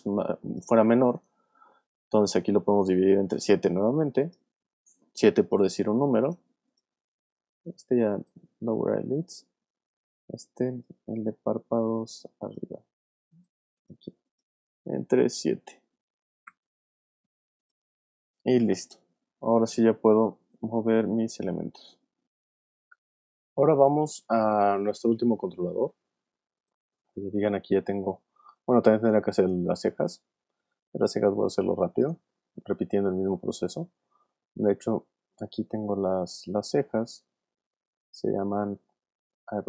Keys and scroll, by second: 1.7 shift+7, 3.0 shift+7, 15.4 shift+7, 16.6 7, 28.6 space.